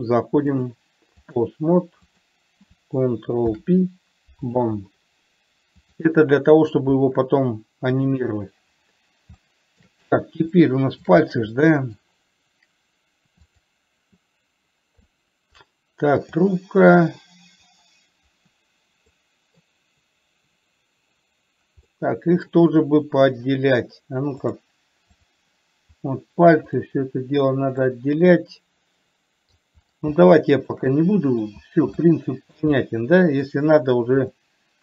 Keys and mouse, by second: 1.0 click, 2.4 click, 3.9 ctrl+p, 6.3-8.5 drag, 9.8 shift+middle click, 10.9 shift+middle click, 11.9 middle click, 13.8 click, 15.4-15.9 middle drag, 19.5 middle click, 22.2 middle click, 24.9 click, 28.3-29.9 middle drag, 30.5-31.0 shift+middle drag, 31.3-31.8 middle drag, 32.3-32.9 shift+middle drag, 33.2-33.9 middle drag, 34.7-34.8 middle drag.